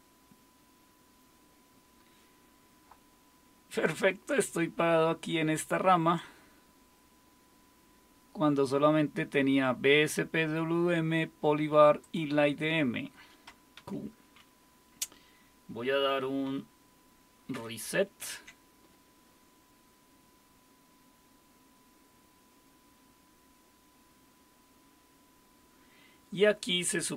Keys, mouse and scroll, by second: 4.4-6.7 drag, 12.0-13.8 drag, 13.8 q, 18.2 alt+super+r.